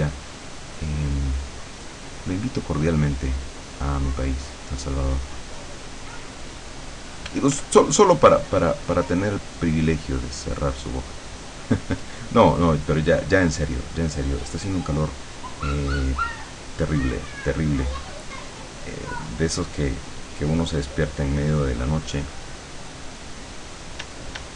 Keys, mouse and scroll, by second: 6.0 click, 7.4 f, 7.9-18.5 drag, 19.3-23.6 drag, 24.0 d.